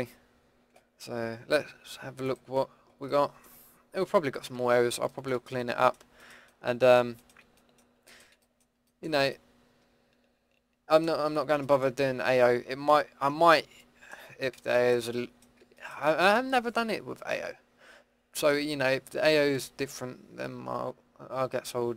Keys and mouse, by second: 2.2 click, 3.1 middle click, 4.4 Tab, 7.9-8.5 middle drag, 9.6 drag, 9.8-11.6 middle drag, 16.8-18.1 middle drag, 18.5 middle click.